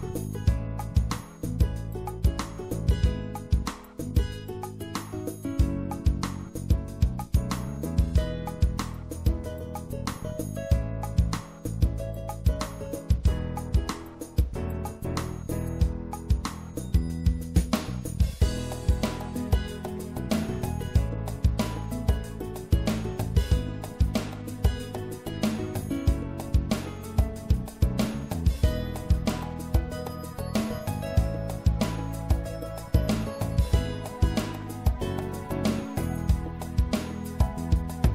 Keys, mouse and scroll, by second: 0.0-3.5 drag, 6.3 middle click, 6.7 click, 11.5 middle click, 11.6 right click, 11.9 middle click, 12.0 click, 12.0 right click, 12.2-16.8 middle drag, 25.4-27.3 middle drag, 27.3-29.1 drag, 29.6 middle click, 35.3 ctrl+z, 35.9 ctrl+z, 35.9 ctrl+z, 36.1 ctrl+z, 36.5 ctrl+z.